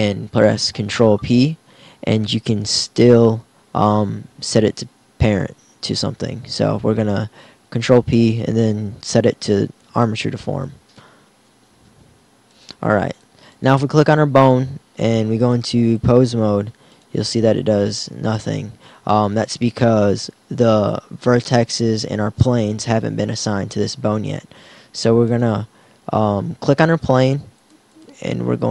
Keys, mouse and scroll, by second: 1.2 ctrl+p, 17.7 right click, 17.7 r.